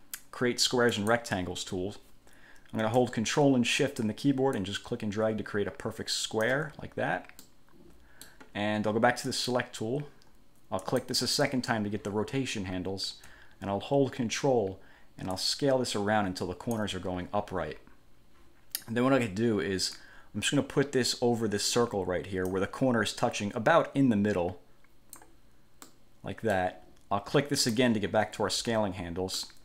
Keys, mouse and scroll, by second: 1.1 click, 4.7-6.8 ctrl+shift+drag, 7.6-8.6 middle drag, 9.5 click, 11.0 click, 15.5-17.1 ctrl+drag, 20.1-22.9 drag, 23.3-25.5 drag, 26.0 middle click, 27.8 click, 29.5 middle click.